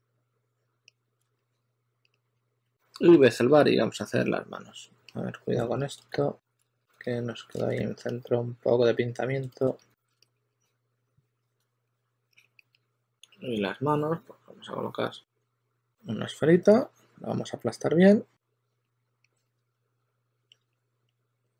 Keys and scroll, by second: 1.1 super+a, 1.4 q, 2.5 s, 6.0 s, 12.6 s, 16.4-17.2 typing, 18.7 typing, 20.8 e.